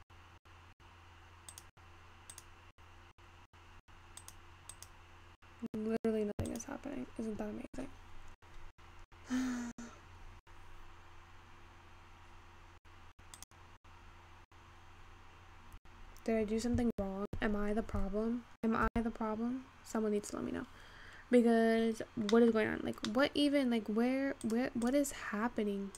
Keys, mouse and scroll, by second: 1.9 click, 3.0-9.2 drag, 9.2-10.9 scroll up 4, 10.9-13.8 scroll down 5, 13.9-17.1 drag, 19.2 Escape, 19.9-20.8 scroll up 4, 20.8-21.9 scroll down 2, 21.9-22.4 scroll down 1, 22.4-23.0 middle drag, 23.0-24.5 scroll up 4, 23.1 middle click, 24.5 click, 24.9 click.